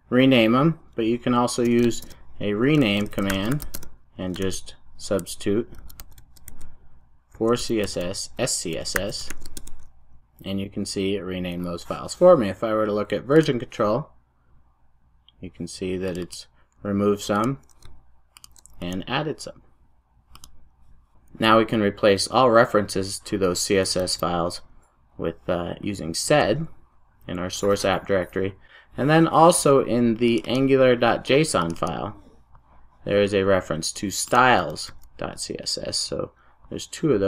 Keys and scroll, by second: 20.4 alt+super+a.